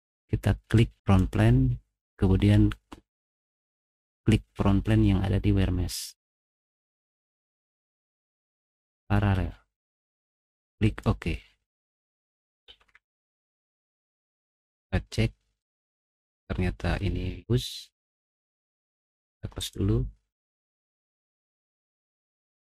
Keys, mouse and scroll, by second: 10.8 right click, 12.0 click, 12.7 ctrl+7, 13.9 middle click, 14.3 scroll down 2, 14.6 middle click, 15.9 middle click, 15.9 scroll down 1, 16.4 middle click, 18.0 click, 19.6 right click, 22.1 middle click.